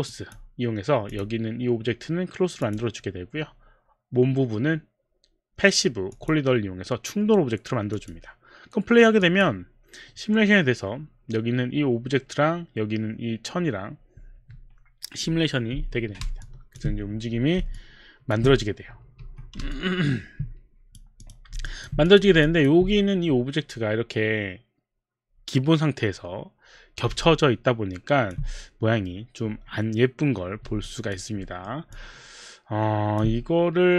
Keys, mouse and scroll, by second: 0.1 click, 1.1 click, 2.6 click, 6.1 click, 8.0 click, 9.2 click, 9.7 click, 16.4 alt+click, 18.2 alt+click, 19.2 Escape, 19.8 alt+Escape, 19.8 alt+click, 20.5 click, 21.2 click, 21.6 alt+click, 22.1 click, 22.4 alt+click, 27.2 alt+click, 30.8 alt+click, 31.4 alt+middle click, 31.9 alt+click.